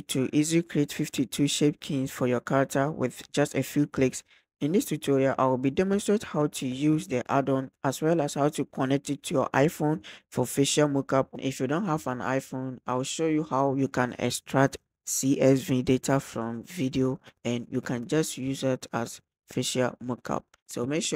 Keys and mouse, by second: 0.0 click, 0.7 click, 1.0 click, 2.2-2.7 drag, 3.8 click.